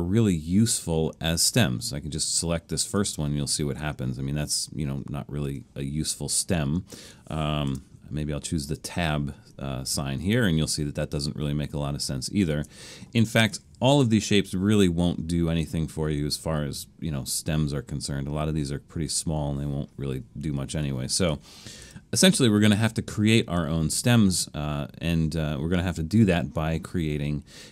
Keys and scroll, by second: 5.5 super+z, 7.7 Return, 12.5 super+z, 13.9 Return, 20.7 super+z, 21.8 Return.